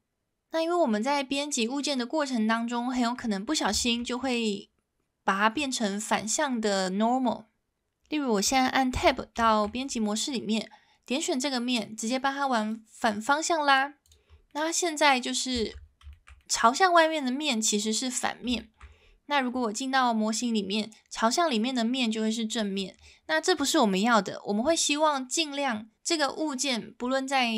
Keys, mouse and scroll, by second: 1.9-3.1 middle drag, 3.7 shift+middle drag, 4.1 middle drag, 9.0 Tab, 9.5 shift+middle click, 12.8 click, 13.2 click, 14.5 middle click, 15.2 middle click, 15.6 shift+middle click, 16.1 shift+middle click, 16.4 middle click, 18.6 shift+middle click, 19.9 middle click, 23.3 middle click.